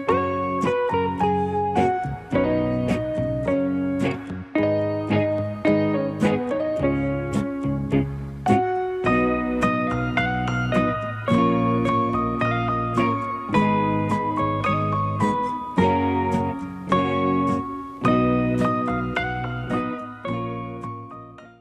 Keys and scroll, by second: 2.5-3.7 typing, 5.5 typing, 13.1 f, 16.0 f, 20.2 f.